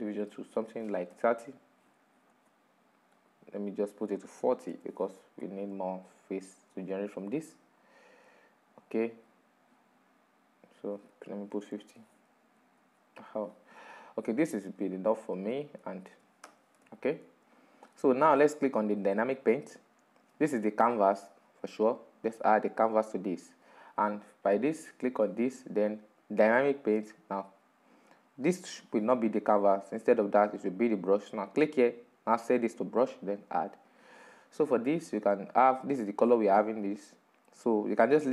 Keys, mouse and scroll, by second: 1.4-8.5 drag, 9.0 middle click, 9.6-10.1 scroll up 7, 10.2 scroll down 6, 10.7-11.8 middle drag, 11.8-12.9 scroll up 2, 12.9-15.9 drag, 16.2-17.4 middle drag, 17.4-17.8 scroll down 2, 17.8 click, 18.2 middle click, 18.7 Tab, 19.2-21.4 middle drag, 21.4-27.0 drag, 27.0 right click, 28.5-31.5 drag, 33.7-36.7 drag, 36.7-38.3 middle drag.